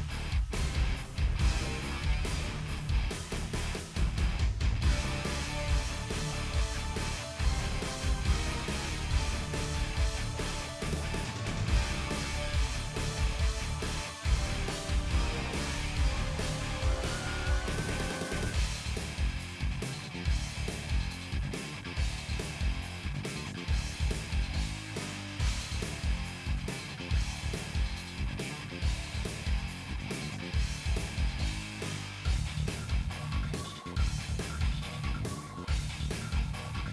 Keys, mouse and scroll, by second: 1.2 scroll down 1, 1.3 middle click, 2.3-2.8 scroll up 2, 3.0 KP_1, 3.2 shift+middle click, 3.4 scroll down 1, 3.6-4.7 drag, 5.4 g, 6.4 middle click, 6.7-7.0 scroll down 2, 7.1 click, 7.6 middle click, 7.8 click, 8.2 2, 8.3 ctrl+click, 9.2 g, 10.4 ctrl+r, 10.9 ctrl+z, 11.1 ctrl+r, 12.7-15.0 middle drag, 15.0 KP_1, 15.6 click, 15.9 1, 16.5 scroll up 1, 16.7 shift+middle click, 17.0 g, 17.8 middle click, 18.0 scroll down 4, 18.1 middle click, 18.2 click, 18.8 click, 19.0 scroll up 1, 19.2 shift+middle click, 19.6 3, 19.6 shift+click, 20.0 middle click, 20.4-21.4 shift+drag, 21.5-21.9 scroll up 2, 24.8 KP_1, 25.1 KP_3, 25.3 KP_1, 26.4 click, 26.9 middle click, 27.4-28.2 scroll up 2, 27.5 shift+middle click, 28.2 click, 29.4 s, 30.1 click, 30.4 s, 31.0 click, 31.4 s, 32.1 click, 32.7 s, 34.6 s, 35.1 shift+middle click, 35.5 click, 36.3 s.